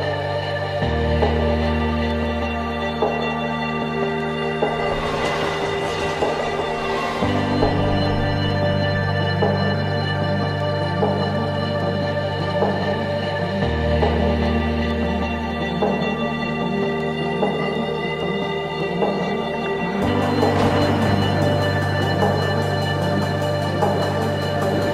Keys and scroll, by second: 1.5 Tab, 1.8-6.6 typing, 5.8 Return, 6.7 Tab, 8.9-12.8 typing, 13.6 Tab, 14.8 Tab, 15.4-16.5 BackSpace, 16.8 Tab, 19.1 Tab, 19.1-22.8 typing, 23.6 Tab.